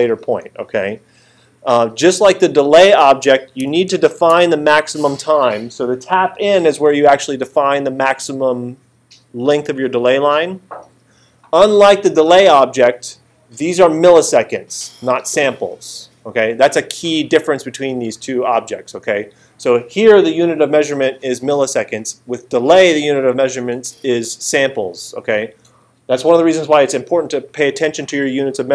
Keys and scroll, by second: 3.9 alt+super+8.